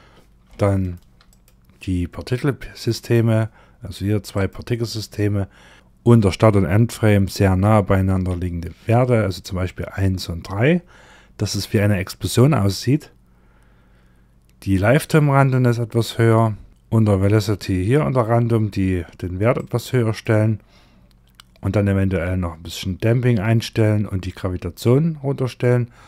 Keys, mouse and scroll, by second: 0.1 shift+middle click, 0.7 click, 2.4 click, 3.1-3.8 scroll up 1, 3.8 click, 3.8-4.9 scroll up 1, 4.9-5.7 scroll down 1, 15.5-16.0 scroll down 1, 16.0-16.7 scroll down 4, 19.0 click, 19.9-20.6 scroll down 4, 20.6-21.3 scroll down 2, 21.3-22.1 scroll down 5, 22.1 scroll down 3, 22.7-25.2 scroll down 9, 25.4-26.0 scroll up 6.